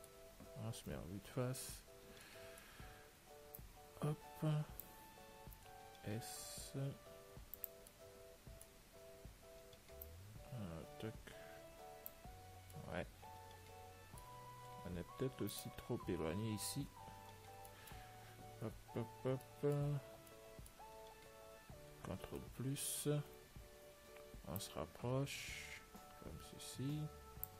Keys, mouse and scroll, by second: 0.0-2.0 middle drag, 2.1 s, 2.5-4.5 middle drag, 3.9-5.8 drag, 8.2-10.3 middle drag, 10.3 click, 14.4 middle click, 15.8-17.7 right drag, 17.7-18.9 middle drag, 20.6-22.6 middle drag, 22.6 ctrl+n, 24.9-26.9 drag.